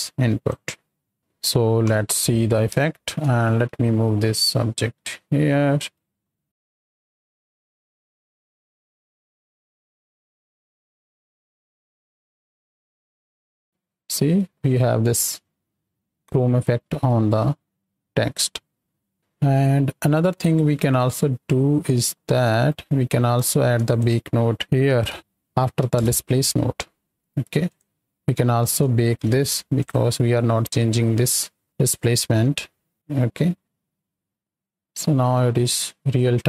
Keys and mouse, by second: 1.8 KP_7, 2.8 shift+drag, 2.9 shift+middle click, 4.0 right click, 6.7 space, 7.6-8.5 middle drag, 9.1 ctrl+space, 16.9 space, 17.5-18.1 drag, 18.4 space, 18.7-19.1 drag, 19.4 click, 20.4 click, 21.1 right click, 22.3 right click, 23.5 shift+a, 29.2 shift+Left, 29.7 click, 31.2 click, 32.1 right click, 33.6 space, 34.1-35.4 drag, 35.8-36.4 drag.